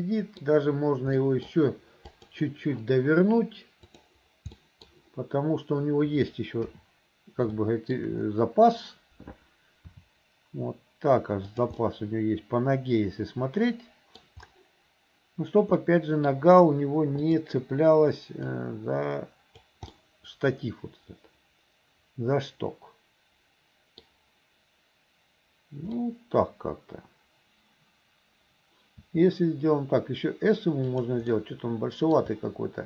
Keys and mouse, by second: 1.3 click, 2.1 click, 4.0 click, 4.6 middle click, 6.7 KP_7, 7.6 shift+middle click, 9.9 r, 11.8-14.2 drag, 13.6 right click, 16.0 click, 16.0 right click, 17.3 click, 18.8-19.8 drag, 20.1-24.2 drag, 20.1-24.2 right drag, 26.2-27.5 drag, 26.2-27.5 right drag, 31.4 click.